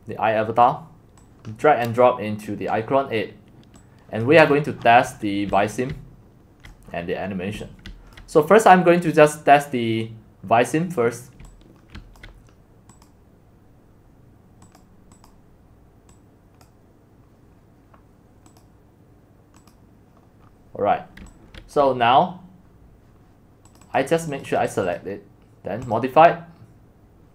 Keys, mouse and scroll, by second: 2.4 click, 3.8 click, 4.5-5.1 scroll down 17, 5.1-5.5 scroll up 4, 5.5-7.9 typing, 6.8 click, 6.9 middle click, 6.9-7.5 scroll down 3, 8.2-10.5 drag, 10.5 middle click, 11.4-12.5 typing, 12.2 click, 13.1 middle click, 14.8-16.9 drag, 16.9-18.1 scroll down 1, 18.1-19.6 scroll down 1, 20.4 click, 20.5 middle click, 21.8-23.7 drag, 23.7 right click, 24.0-27.2 drag.